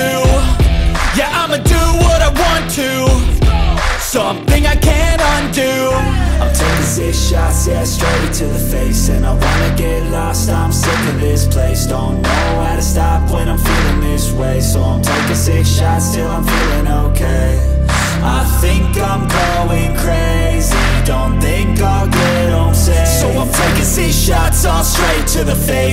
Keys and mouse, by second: 0.4-4.5 drag, 5.5 click, 6.9 click, 9.2 r, 10.4 click, 12.2 r, 13.2 drag, 13.6 drag, 15.9 click, 16.7-18.8 drag, 19.7 click, 20.6-24.3 drag, 25.1 click.